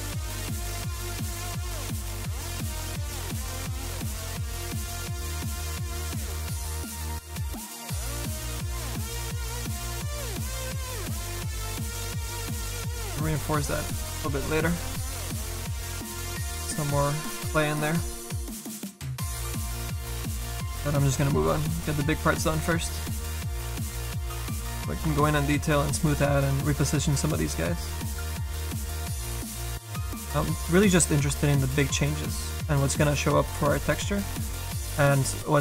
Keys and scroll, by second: 8.5 s, 22.4 s.